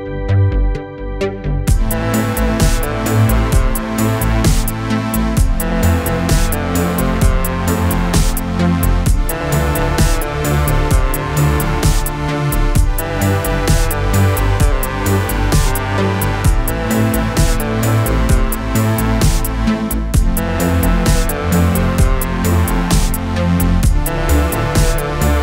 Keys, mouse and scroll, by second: 3.4 click, 12.9-13.9 typing, 14.4-15.7 click, 17.4-19.8 click, 22.1 click, 23.3 c, 24.1 click.